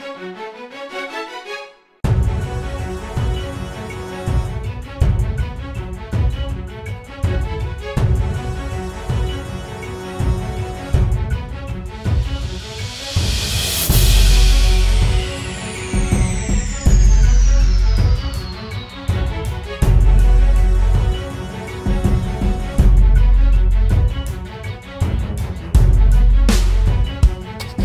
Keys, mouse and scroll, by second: 3.6 alt+click, 16.0-16.8 typing, 18.9 typing, 20.9-21.6 typing, 23.0-23.9 typing, 26.4 typing.